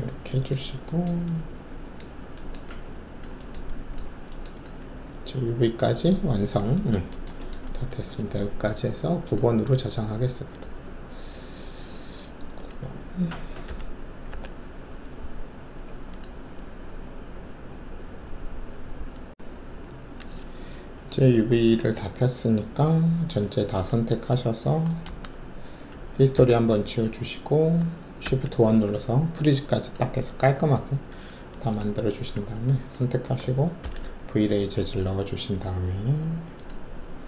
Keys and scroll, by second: 13.6 Delete, 14.2 9, 25.0 ctrl+a, 26.3 alt+d, 28.2 shift+1, 33.8 alt+shift+v.